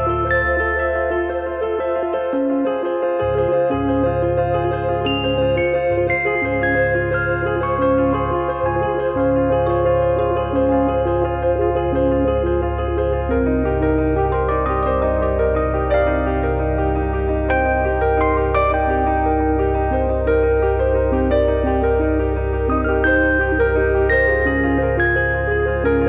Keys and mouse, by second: 3.1 click, 3.3 e, 4.1 e, 5.1 click, 5.1 e, 7.0 click, 7.0 e, 9.4 click, 10.0 click, 11.1 click, 11.8 click, 12.5 click, 13.5 click, 16.1 click, 18.2 click, 18.5 click, 19.3 middle click, 19.8 shift+middle click, 20.4 click, 21.5 click, 22.4 ctrl+click, 24.3 click.